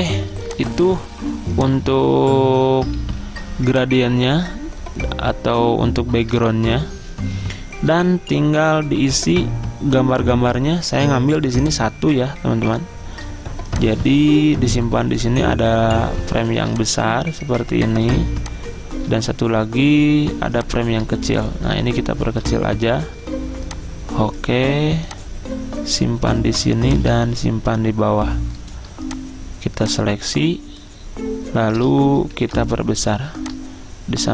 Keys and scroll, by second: 3.1 ctrl+z, 32.5 ctrl+g.